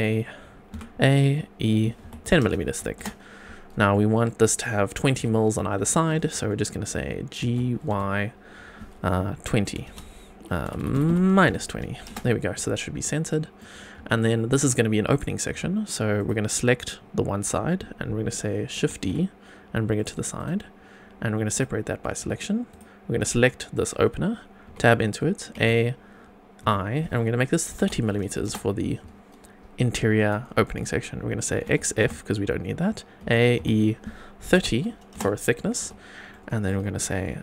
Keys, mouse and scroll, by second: 0.7 a, 2.0 e, 2.3 KP_1, 2.4 KP_0, 2.9 Return, 3.9 middle click, 5.2 Tab, 6.0 middle click, 7.4 g, 7.9 y, 9.7 KP_2, 9.8 KP_0, 10.6 Left, 10.7 Left, 10.9 Left, 11.0 Left, 11.4 KP_Subtract, 12.1 Return, 12.7 scroll down 2, 13.1-13.5 middle drag, 13.7 scroll up 2, 14.1 shift+middle click, 15.5 Tab, 16.1 click, 18.9 shift+d, 20.0 click, 20.4 right click, 22.2 Tab, 22.7 click, 24.6 Tab, 25.5 a, 26.6 i, 27.6 KP_3, 27.8 KP_0, 28.4 Return, 31.6 x, 33.2 a, 33.6 e, 34.4 KP_3, 34.6 KP_0, 35.1 Return, 35.8 Tab, 36.3-36.6 middle drag.